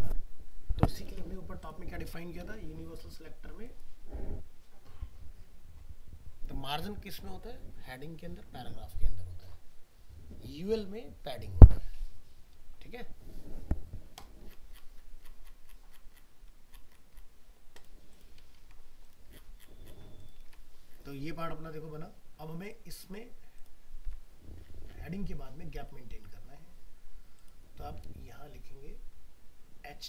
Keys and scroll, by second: 1.1 alt+Tab, 2.4 ctrl+Home, 18.6 ctrl+s, 20.4 alt+Tab, 24.1 alt+Tab.